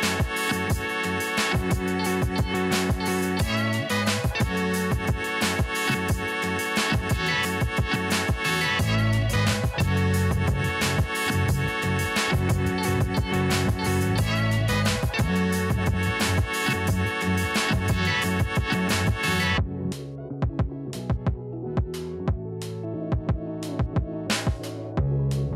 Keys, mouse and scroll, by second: 3.6 Down, 3.8 click, 4.7-5.3 alt+scroll up 2, 5.4 alt+scroll down 1, 6.0 click, 6.1 click, 8.8 right click, 10.1-11.6 drag, 12.0 alt+scroll down 1, 12.5 alt+scroll up 1, 12.9 ctrl+s, 14.6-15.5 scroll up 1, 15.5 click, 18.1 click, 18.3-18.7 alt+scroll up 1, 19.1 click, 19.3 scroll up 2, 19.8 click, 20.1 alt+scroll up 1, 20.7 ctrl+s.